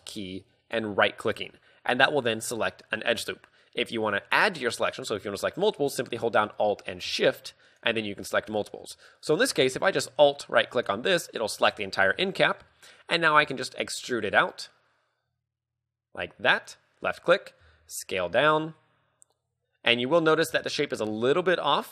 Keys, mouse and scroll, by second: 1.3 alt+right click, 2.3 alt+right click, 3.2 alt+right click, 7.8 alt+shift+right click, 8.7 alt+shift+right click, 10.8 alt+right click, 11.8 KP_3, 12.5 shift+middle click, 13.4 e, 16.7 click, 17.8 s, 20.3 click, 20.5 z.